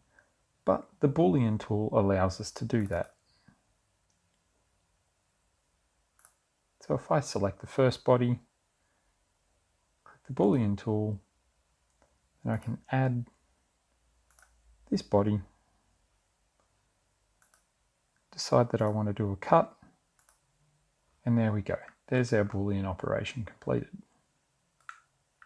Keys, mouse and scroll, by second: 4.9 click, 8.4 click, 12.5 click, 14.6 click, 16.4 click, 19.5 click, 20.8 click, 22.2 click, 24.0 middle click, 24.2 scroll down 1, 24.3 click, 24.5-25.4 middle drag.